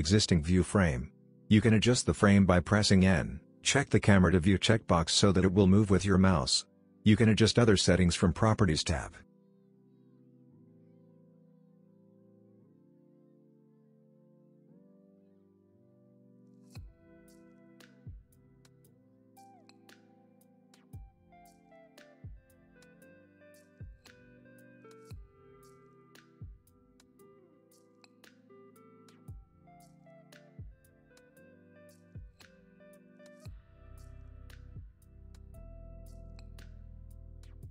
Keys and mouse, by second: 0.8 middle click, 1.7 shift+middle click, 2.7 shift+middle click, 3.2 middle click, 4.7 shift+middle click, 7.8 click, 9.5 n, 10.6 click, 21.0 n, 21.8 click, 26.3 click, 27.9-29.9 drag, 31.7 click, 32.7 click, 32.9 n, 32.9 middle click, 33.2 Tab, 33.7 shift+click, 33.9 g, 34.4 KP_0, 34.7 Tab, 36.3 n, 37.1 middle click.